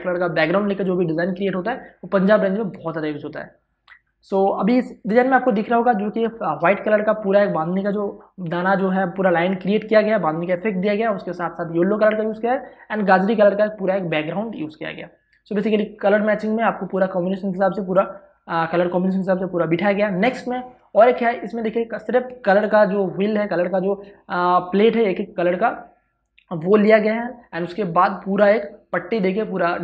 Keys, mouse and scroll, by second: 5.8 space, 6.0 ctrl+click, 11.5 space, 11.7 ctrl+click, 20.1 ctrl+shift+Tab, 21.0 space, 21.2 ctrl+click.